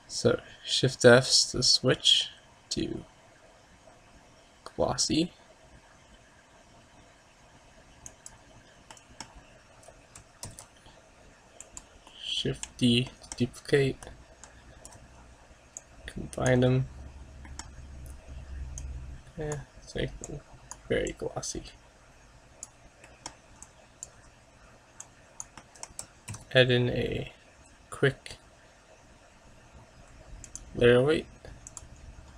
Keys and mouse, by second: 9.2 middle click, 10.6 shift+d, 14.2-16.3 right drag, 15.9-17.6 drag, 17.2-18.8 middle drag, 19.0-22.9 drag, 23.3 middle click, 23.9 click, 24.9 click, 26.4 shift+a, 32.1-32.3 middle drag.